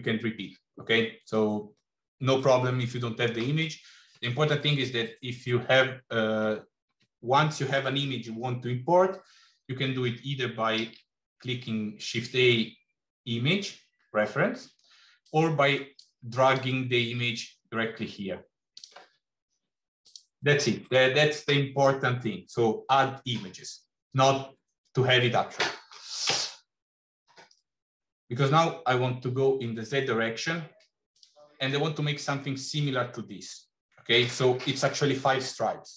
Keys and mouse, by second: 10.6 shift+a, 19.8 click, 20.7 Delete, 30.9 click.